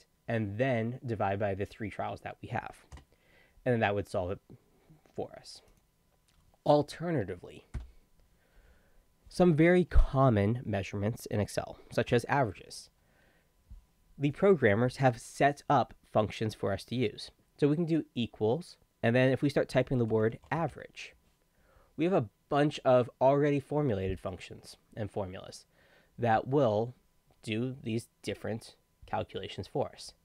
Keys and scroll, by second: 19.7-21.2 typing.